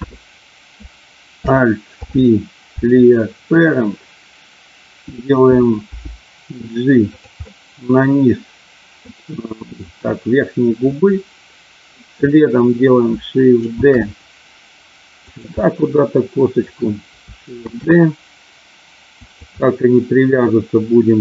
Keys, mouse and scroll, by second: 1.8 alt+p, 5.8 g, 7.1 click, 7.3-9.0 middle drag, 11.0-12.0 middle drag, 13.7 shift+d, 15.2 click, 15.6-16.7 middle drag, 17.6 shift+d, 19.2 click, 19.5-21.2 middle drag.